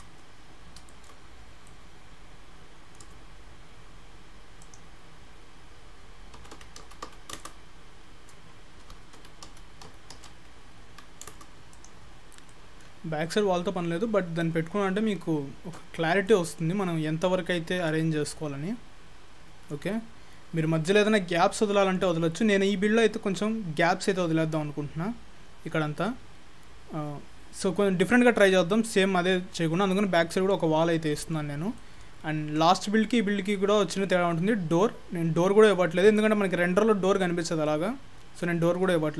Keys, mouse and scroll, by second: 0.4-0.9 scroll down 4, 0.9 shift+middle click, 1.3-1.7 scroll up 6, 1.7 shift+middle click, 4.7 click, 8.9 g, 11.7 click, 12.1-12.5 scroll down 7, 12.5 middle click, 13.0-14.4 scroll up 1, 14.4 middle click, 14.4 scroll up 1, 16.1 scroll down 2, 16.3 middle click, 18.3 middle click, 19.9-21.5 scroll up 3, 26.7-27.5 scroll down 2, 26.9-27.5 scroll up 1, 29.0-29.6 scroll down 1, 29.6 middle click, 29.6 scroll down 1, 31.6-32.1 scroll down 3, 31.8 middle click, 36.7-38.2 scroll up 3, 38.2 scroll down 2, 38.5 middle click.